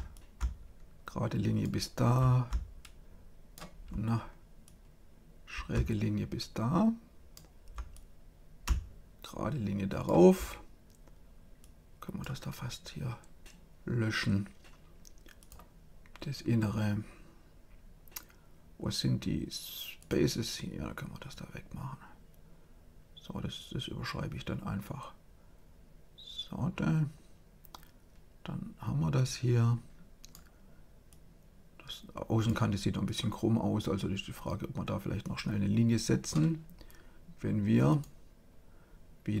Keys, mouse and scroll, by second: 0.1-1.9 drag, 2.7-6.2 drag, 7.9-9.5 drag, 11.5-13.2 drag, 15.3-17.1 drag, 21.2-23.1 drag, 31.0-34.7 drag, 35.1-36.8 drag, 37.8-39.4 drag.